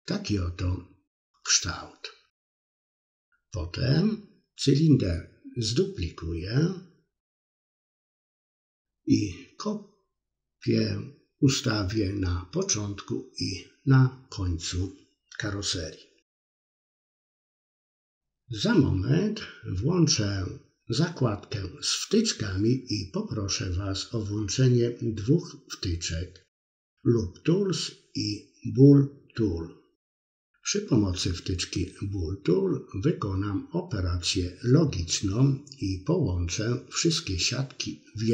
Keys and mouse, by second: 1.0 click, 1.2 middle click, 1.6 KP_3, 4.6 middle click, 5.4 middle click, 5.7 KP_3, 6.1 a, 6.3 g, 6.9 middle click, 7.6 click, 7.9-9.3 middle drag, 9.8 g, 10.4 middle click, 11.1 KP_3, 13.0-14.6 middle drag, 14.8 KP_3, 15.5 Tab, 16.4 Tab, 16.9 g, 17.6-18.6 middle drag, 18.7 KP_7, 19.6 s, 20.3 middle click, 21.3 KP_3, 22.5 Tab, 22.9 middle click, 24.0 click, 30.0 KP_1, 30.5 middle click, 31.1 click, 32.2 ctrl+shift+b, 33.9 middle click, 34.4 middle click, 35.9 Tab, 36.6 middle click, 37.0 middle click.